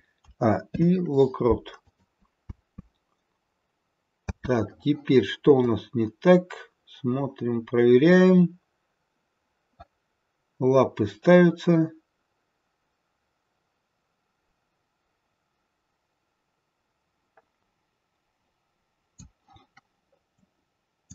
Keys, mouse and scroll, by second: 0.1 a, 0.7 i, 2.4 space, 4.3 space, 5.5 click, 20.2 click.